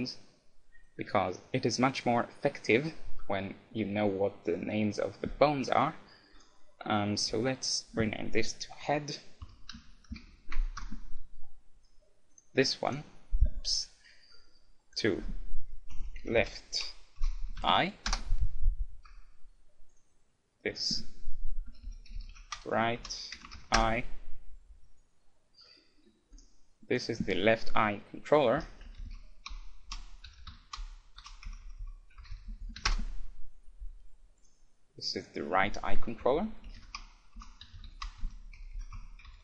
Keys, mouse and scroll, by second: 6.4-8.3 drag, 12.4-14.6 right drag, 13.6-16.0 middle drag, 14.9-16.6 drag, 19.9-21.8 right drag, 20.7-22.5 drag, 25.8-26.9 middle drag, 26.4-28.1 right drag, 26.9-28.8 drag, 32.6 l, 34.4 right click, 35.1-36.2 middle drag, 36.2 click.